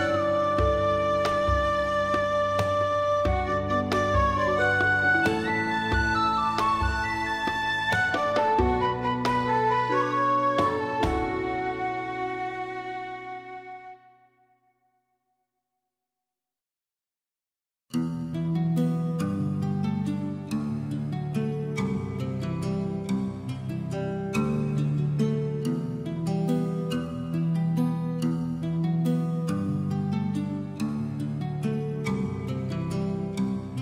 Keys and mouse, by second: 0.4 alt+middle click, 0.7 click, 1.2 g, 2.3 click, 2.6 click, 3.1 g, 3.5 click, 3.7 click, 3.8 g, 4.0 click, 4.4 g, 4.5 click, 4.8 g, 5.0 click, 5.2 click, 5.4 click, 5.5 middle click, 5.9 alt+middle click, 6.3 click, 6.4 middle click, 6.7 middle click, 6.7 g, 7.5 click, 7.9 middle click, 8.3 middle click, 8.5 middle click, 8.7 alt+middle click, 8.8 alt+middle click, 9.5 g, 11.4 click, 11.7 click, 12.2 right click, 12.3 g, 13.4 click, 13.6 click, 13.7 g, 14.1 click, 14.5 right click, 14.7 g, 14.9 click, 15.2 middle click, 15.3 middle click, 15.6 middle click, 15.8 alt+z, 16.2 middle click, 16.3 Tab, 16.6 alt+middle click, 16.7 alt+z, 17.0 shift+middle click, 17.2 alt+middle click, 17.4 shift+middle click, 17.7 alt+middle click, 17.9 shift+middle click, 18.5 shift+Tab, 18.5 middle click, 18.8 alt+z, 19.0 click, 19.4 g, 20.4 click, 20.8 shift+middle click, 21.4 g, 22.1 click, 22.4 alt+z, 22.6 shift+middle click, 23.0 alt+z, 23.1 click, 23.4 middle click, 23.6 g, 23.7 middle click, 24.2 click, 24.4 shift+middle click, 24.7 click, 24.8 click, 26.3 click, 26.3 g, 26.5 middle click, 27.2 shift+middle click, 27.4 alt+z, 27.6 Tab, 27.7 middle click, 28.1 alt+middle click, 28.2 alt+middle click, 28.5 shift+middle click, 28.8 shift+middle click, 31.3 ctrl+s, 31.6 shift+middle click, 32.4 click, 33.3 click.